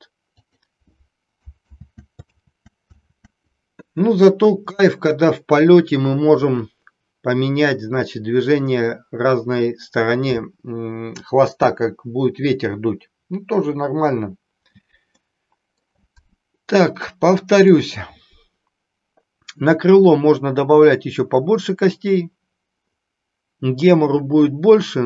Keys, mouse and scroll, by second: 1.6 ctrl+z, 2.2 ctrl+z, 3.0 ctrl+z, 4.9 middle click, 15.2 middle click, 17.2 middle click.